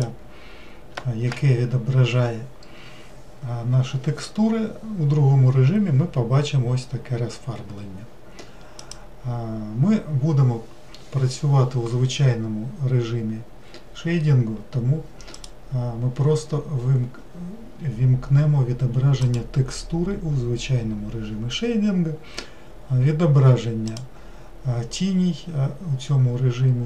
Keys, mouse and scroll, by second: 8.8-26.8 drag.